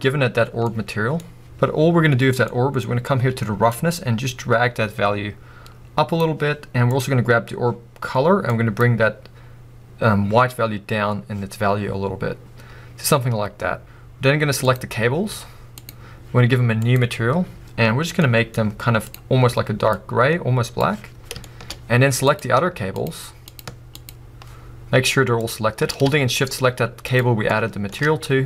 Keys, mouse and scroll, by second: 0.6-0.9 scroll down 1, 0.9-3.9 middle drag, 3.9-7.3 drag, 14.8 click, 15.9 z, 16.9-19.9 drag, 21.4-22.4 shift+middle drag, 21.7-22.4 scroll up 2, 22.4 click, 23.0 shift+click, 26.4 click, 27.5-28.4 shift+middle drag, 27.9-28.4 scroll up 3.